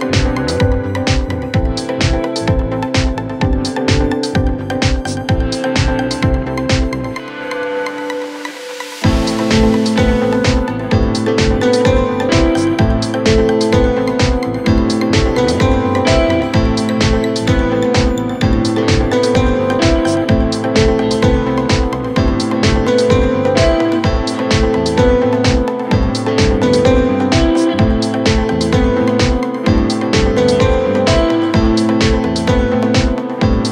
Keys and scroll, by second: 2.8 F3, 18.3 shift+F2, 19.1 Escape, 19.5 F3, 23.7 shift+F2, 25.2 F3, 25.8 ctrl+q.